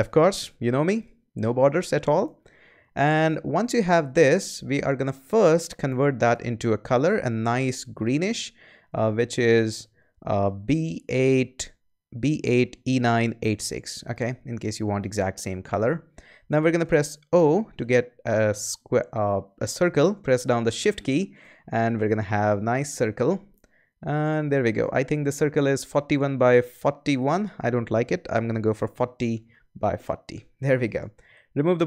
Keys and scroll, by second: 17.3 o, 28.5-30.1 typing.